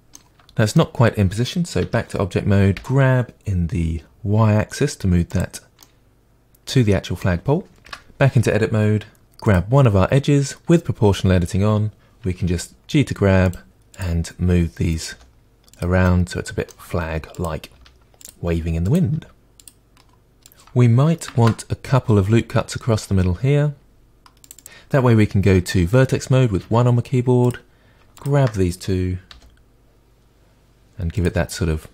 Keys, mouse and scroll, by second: 1.8 Tab, 2.7 g, 5.4-5.8 drag, 5.8-7.8 middle drag, 7.8 Tab, 9.4 click, 12.5 g, 13.8 click, 13.9 g, 14.3 click, 14.5 g, 15.3 click, 15.4 g, 15.9 middle click, 16.6 click, 16.8 g, 17.3 click, 17.4 g, 18.1 click, 18.2-21.4 middle drag, 18.5 g, 18.9 click, 21.4 ctrl+r, 26.6 1, 27.4 click, 29.3 g, 31.2 click.